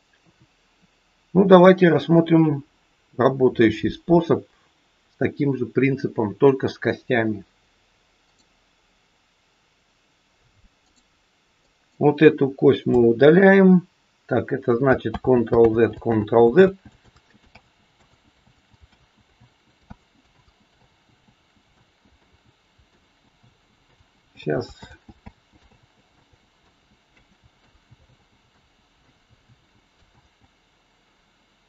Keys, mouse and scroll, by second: 0.1 KP_2, 3.0 scroll up 1, 3.4-5.9 scroll down 1, 8.1 click, 10.9 click, 12.9 Delete, 15.1 ctrl+z, 15.5 ctrl+z, 16.5 ctrl+z, 17.0 ctrl+z, 17.5 ctrl+z, 17.9 ctrl+z, 18.5 ctrl+z, 18.9 ctrl+z, 19.2 ctrl+z, 19.9 ctrl+z, 20.2 ctrl+z, 20.8 ctrl+z, 21.1 ctrl+z, 21.8 ctrl+z, 22.1 ctrl+z, 22.9 ctrl+z, 23.4 ctrl+z, 23.8 ctrl+z, 24.4 ctrl+z, 24.8 ctrl+z, 25.1 ctrl+z, 25.6 ctrl+z, 26.1 ctrl+z, 26.8 ctrl+z, 27.1 ctrl+z, 27.5 ctrl+z, 28.0 ctrl+z, 28.5 ctrl+z, 29.0 ctrl+z, 29.5 ctrl+z, 30.1 ctrl+z.